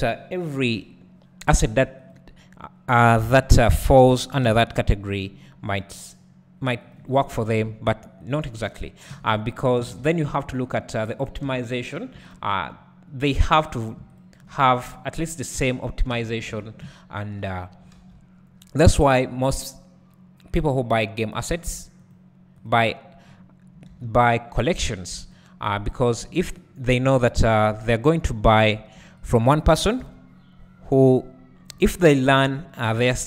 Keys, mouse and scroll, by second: 0.9-1.2 scroll down 1, 1.2-2.1 scroll up 2, 2.1 click, 3.4 KP_1, 4.4 ctrl+KP_3, 5.7 g, 6.9 click, 8.3 shift+click, 9.1 j, 9.9 alt+a, 11.5 3, 12.0 click, 12.3 shift+click, 13.5 f, 13.8 click, 14.2 shift+click, 15.6 f, 16.1 alt+a, 16.3 scroll down 1, 16.5 Tab, 16.8 `, 17.7-21.7 scroll up 1, 23.1 click, 25.1 s, 25.3-28.6 drag, 27.3 Tab, 28.0 1, 29.3 ctrl+click, 30.0 KP_7, 32.2-33.1 scroll up 1, 33.1 g.